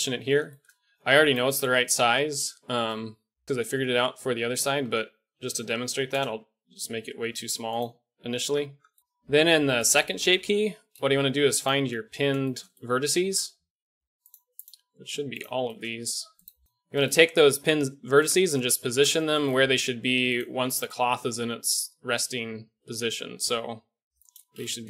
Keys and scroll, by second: 0.9 g, 4.6 s, 7.1 g, 8.3 Tab, 9.0 Tab, 9.0 a, 10.2 Tab, 16.6 g, 17.6 g, 19.7 g, 22.2 g.